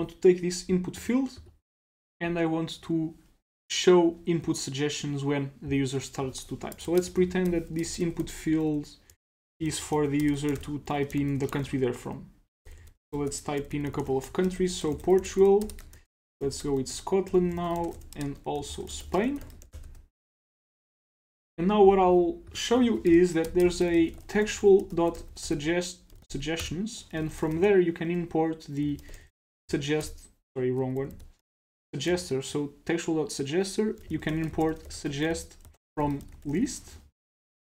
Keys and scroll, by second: 20.3 super+s, 21.4 super+s, 22.8 super+Right.